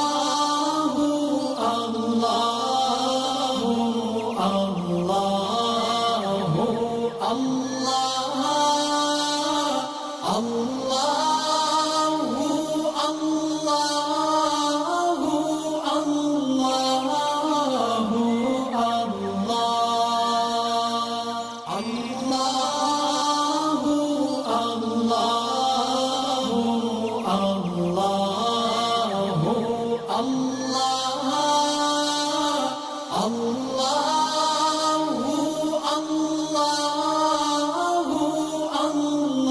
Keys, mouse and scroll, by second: 0.9 space, 1.0-2.5 click, 1.4 space, 2.7 alt+scroll up 1, 3.2 alt+scroll down 1, 4.1 space, 4.2 click, 5.1 alt+scroll up 1, 5.6-7.2 drag, 7.3 alt+scroll down 1, 8.7 click, 13.9-14.5 click, 18.6-19.3 alt+scroll up 2, 19.5 space, 19.7 click, 21.7 alt+scroll down 1, 22.5 alt+scroll up 1, 23.7 space, 23.9 click, 26.0 alt+scroll down 1, 27.1-27.5 alt+scroll down 1, 27.6 click, 28.3 alt+scroll down 1, 28.8 space, 29.0 click, 29.5 alt+scroll up 1, 30.3 click, 34.4 alt+scroll down 1, 35.3 click, 35.7 alt+scroll up 1, 36.4 space, 36.6 click, 37.5 space, 37.6 click, 38.1 space, 38.6 alt+scroll down 1, 39.4 alt+scroll up 1.